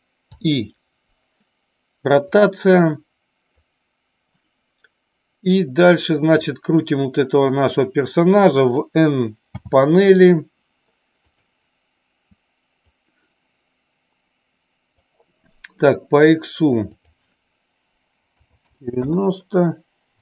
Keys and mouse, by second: 3.7-6.6 drag, 11.3 click, 12.9-15.1 drag, 17.1-19.4 drag.